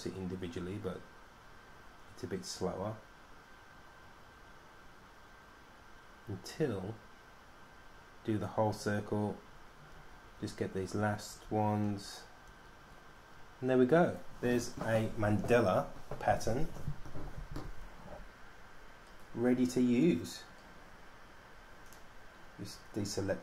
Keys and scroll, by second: 0.6 super+d, 1.1 super+d, 1.2 super+d, 1.9 super+d, 2.2 super+d, 3.9 super+d, 5.7 super+d, 16.3 super+d, 16.6 super+d, 16.7 super+d.